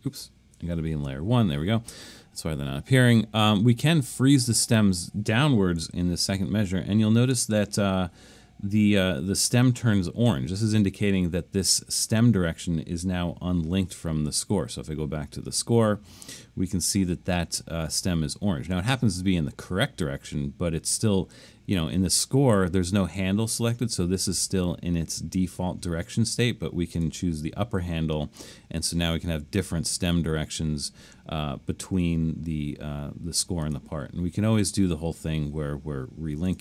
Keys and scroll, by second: 0.9 alt+super+1, 6.5 super+=, 6.9 super+=.